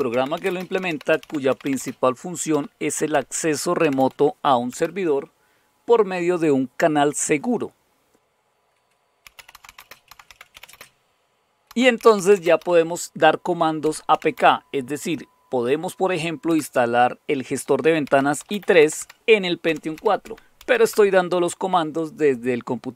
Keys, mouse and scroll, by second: 0.0-4.6 typing, 8.9-14.8 typing, 16.4 Return, 17.8-21.0 typing.